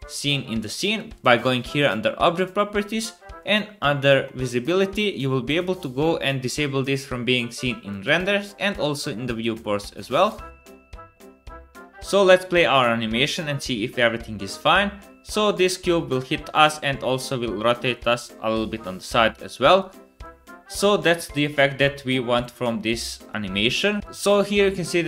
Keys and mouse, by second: 1.1 click, 6.4 click, 6.8 click, 7.2 middle click, 8.5 click, 9.3-10.5 middle drag, 9.3 KP_0, 10.1 space, 10.5-12.0 drag, 11.8 space, 15.3 click, 15.3 middle click, 15.3 right click, 19.1 space, 19.2-20.4 drag, 20.4 click, 22.9-24.0 drag, 22.9-24.0 middle drag, 22.9-24.0 right drag, 24.6 middle click.